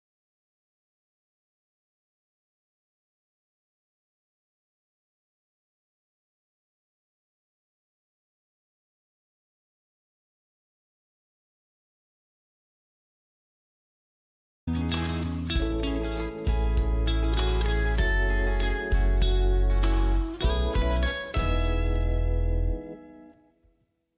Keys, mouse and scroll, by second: 0.0 scroll down 1, 0.2 space, 1.1 right click, 1.1 click, 1.4 scroll down 1, 1.5 click, 1.7 scroll up 1, 1.9 click, 2.1 right click, 2.6 click, 3.4 scroll up 1, 3.5 click, 4.7 space, 4.9 click, 6.8 scroll down 1, 6.9 click, 7.5 scroll up 1, 7.7 click, 8.2 scroll up 1, 8.5 click, 8.8 scroll down 1, 9.6 space, 9.8 Delete, 9.9 click, 10.5 click, 11.2 shift+click, 11.8 ctrl+click, 12.2 g.